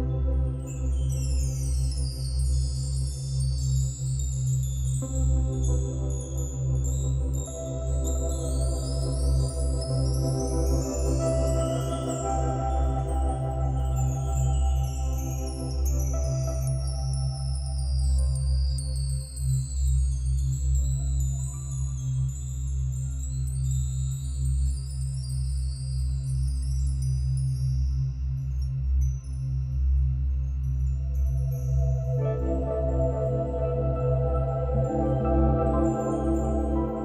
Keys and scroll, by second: 5.1 ctrl+=, 5.2 ctrl+-, 9.1 space, 10.4 space, 12.5 ctrl+e, 17.8 ctrl+-, 17.9 ctrl+=, 18.0 ctrl+-, 18.1 ctrl+=, 23.7 ctrl+-, 24.7 ctrl+=, 25.7 space, 31.9 ctrl+-, 32.1 ctrl+=, 32.2 ctrl+-, 33.8 ctrl+d.